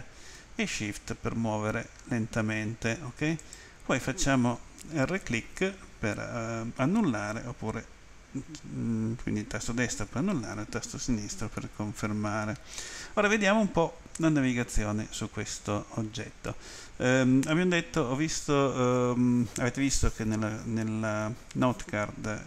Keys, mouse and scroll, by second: 3.4 right click.